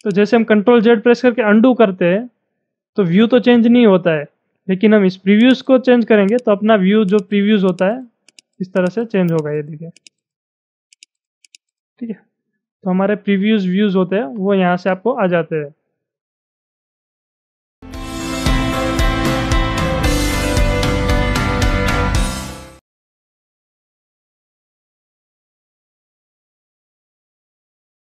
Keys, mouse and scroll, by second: 0.2 click, 5.4 click, 6.4 click, 7.3 click, 7.9 click, 8.4 click, 8.8 click, 10.1 click, 10.9 click, 11.6 click, 15.4 scroll down 1, 15.6-16.0 scroll up 3, 16.6-17.4 scroll down 10.